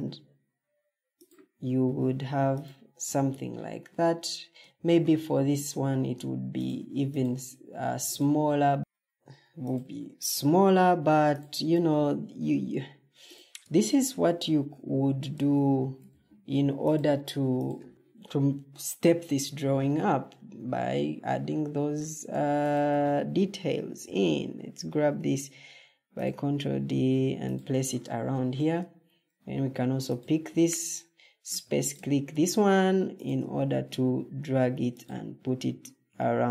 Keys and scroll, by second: 4.4 Escape, 6.7 Escape, 7.3 ctrl+z, 8.6 ctrl+z, 11.7 ctrl+d, 15.2 Escape, 16.0 ctrl+d, 17.6 Escape, 23.9 ctrl+d, 27.6 Escape, 31.3 ctrl+d.